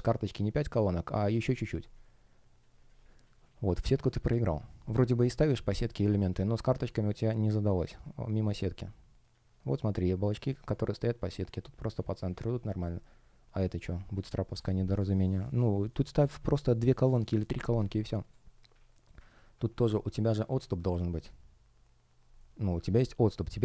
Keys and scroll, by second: 4.3 space, 5.6 space, 19.8 space.